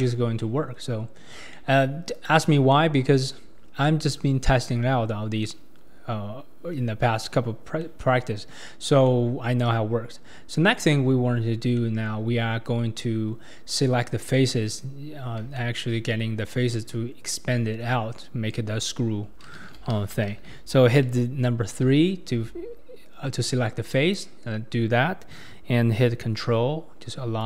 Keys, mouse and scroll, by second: 2.3 click, 2.7-7.5 middle drag, 7.5-7.8 scroll up 3, 7.8 middle click, 8.7-9.0 scroll down 2, 9.0 scroll up 1, 9.1-14.9 middle drag, 15.3-15.6 scroll down 2, 15.6-18.3 shift+middle drag, 18.3-18.9 scroll up 2, 21.9 3, 23.9 click, 27.4 ctrl+click.